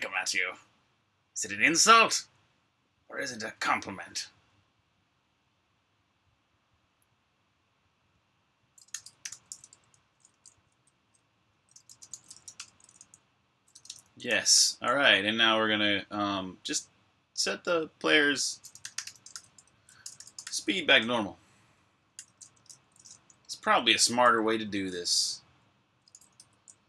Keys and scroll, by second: 8.4-14.8 typing, 18.2-20.0 typing, 21.7-24.5 typing, 25.9-26.6 typing.